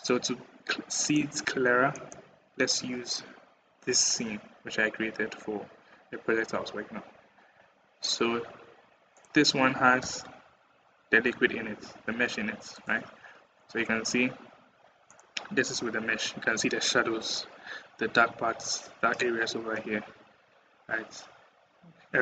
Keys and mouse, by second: 9.0 click, 9.8 g.